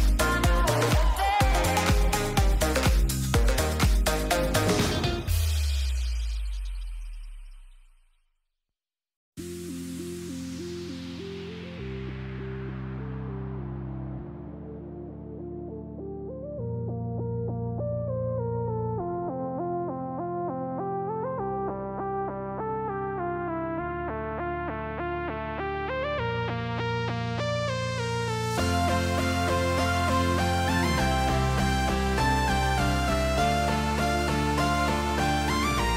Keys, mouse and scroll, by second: 3.7 click, 4.3 drag, 7.1 click, 12.8 click, 13.4 click, 18.9 ctrl+z, 20.6 middle click, 21.4 middle click, 21.8 middle click, 22.3 middle click, 22.7 middle click, 23.3 middle click, 24.1 shift+click, 25.1 ctrl+z, 25.5 middle click, 26.3-28.8 drag, 29.4 middle drag, 31.5 middle click, 32.1 middle click, 32.4 middle click, 32.8 middle drag, 33.3 drag, 34.3-34.9 middle drag.